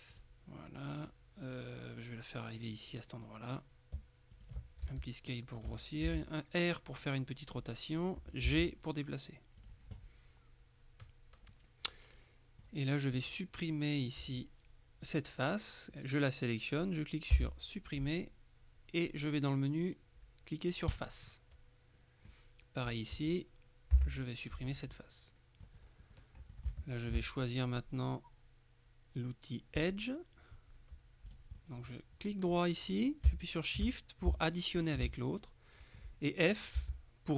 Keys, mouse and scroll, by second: 0.2 click, 4.5 click, 4.9 s, 5.7 click, 6.1 r, 7.6 click, 8.5 g, 9.7 click, 11.6-13.2 middle drag, 17.4 Delete, 21.0 click, 23.0 right click, 24.1 Delete, 24.7 click, 26.3 middle click, 26.8 shift+middle click, 29.9 click, 31.4 right click, 34.0 shift+middle click, 35.2 right click, 36.9 f.